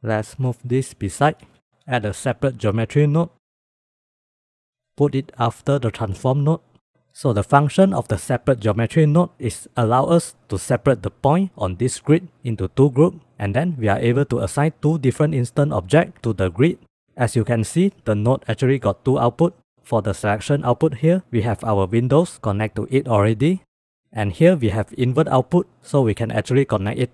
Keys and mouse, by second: 1.2 click, 1.9 shift+a, 17.6-18.6 drag, 19.1-19.6 drag, 19.9-20.5 drag, 21.0 middle click, 21.4 middle click, 23.7 middle click, 24.2-25.5 drag.